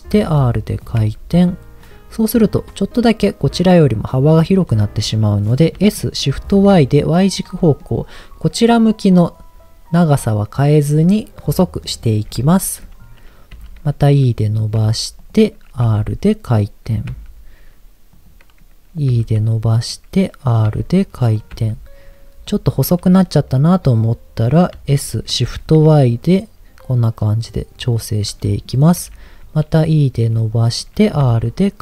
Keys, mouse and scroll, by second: 0.1 r, 0.8 click, 1.0 g, 1.8 click, 5.9 s, 6.5 shift+y, 7.3 click, 7.6 middle click, 11.2 middle click, 12.3 KP_1, 13.5 e, 14.3 click, 14.7 g, 15.2 click, 15.8 r, 16.9 click, 17.1 g, 18.1 click, 19.1 e, 19.8 click, 20.7 r, 21.4 click, 21.5 g, 22.4 click, 24.7 s, 25.6 shift+y, 27.9 click, 29.0 e, 30.5 click, 31.2 r.